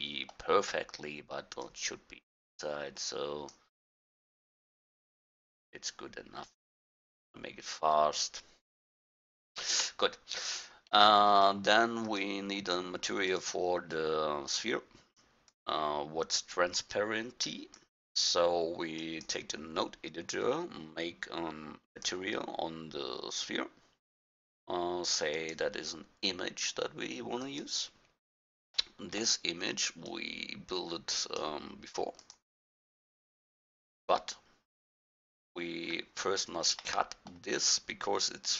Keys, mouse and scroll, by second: 1.7-3.5 drag, 4.4-6.3 middle drag, 9.9 KP_1, 12.1-13.0 right drag, 15.5 click, 15.7 click, 15.9 click, 18.5-19.5 drag, 21.9-23.8 drag, 25.4-27.2 drag, 27.3-30.1 middle drag, 30.1 drag, 30.3 click, 31.9 middle drag, 36.2-37.1 middle drag.